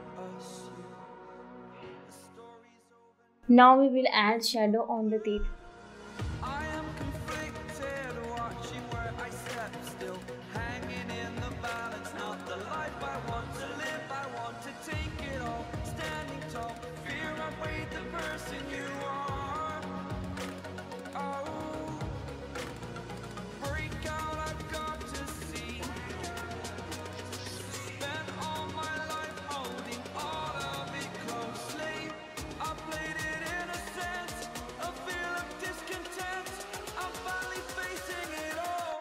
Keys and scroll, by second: 11.7-12.7 typing, 12.1 ctrl+z, 13.8 ctrl+z, 15.8 [, 15.9 [, 16.7 ctrl+z, 17.3 ctrl+z, 20.8 [, 22.3 ], 22.8 [, 24.7 [, 24.7 [, 25.3 [, 30.1 ctrl+z, 32.3 ctrl+z, 33.6 ctrl+z, 34.3 ], 35.8 ctrl+z, 36.6 [, 36.6 [.